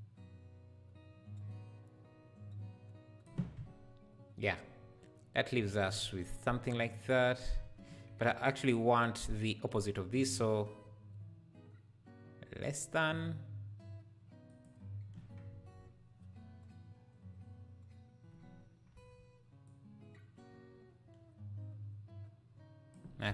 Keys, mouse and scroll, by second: 9.0 click, 10.1-14.6 drag, 19.6-23.3 shift+drag.